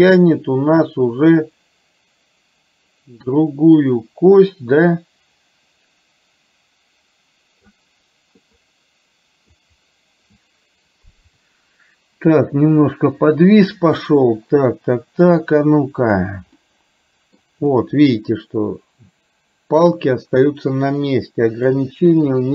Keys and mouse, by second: 14.2-15.4 middle drag, 16.0 click, 16.7-17.5 middle drag, 17.9 middle click, 21.8-22.5 middle drag.